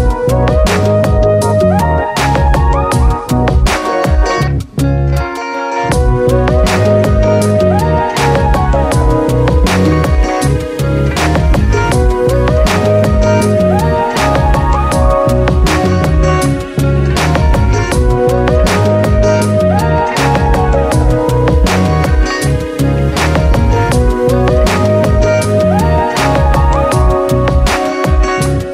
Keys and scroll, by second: 7.8 Down, 13.0 Down, 15.1 Return.